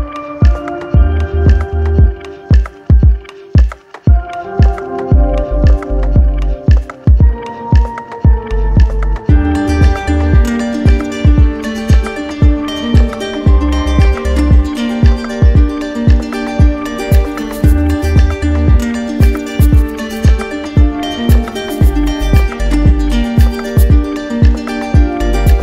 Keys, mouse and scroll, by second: 0.3 click, 0.8 click, 1.3 click, 1.8 click, 3.3 click, 3.8 click, 4.3 click, 6.0 click, 6.7 alt+right click, 7.4 right click, 8.2 right click, 9.0 right click, 10.4 click, 11.8 click, 12.7 right click, 13.6 right click, 15.0 click, 15.4 shift+click, 16.2 ctrl+z, 16.6 click, 17.3 click, 17.9 ctrl+z, 19.1 click, 20.6 click, 21.5 right click, 22.2 shift+right click, 22.9 alt+right click, 24.4 click, 25.3 click.